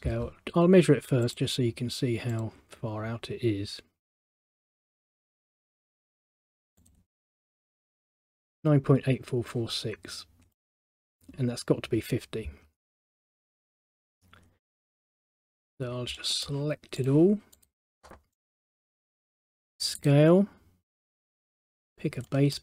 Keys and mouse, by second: 1.4 click, 2.4 click, 4.8 click, 5.3 middle click, 6.9 click, 10.6 middle click, 13.7 middle click, 16.3 middle click, 17.1 click, 17.7 click, 18.5 right click, 20.1 click, 22.4 middle click.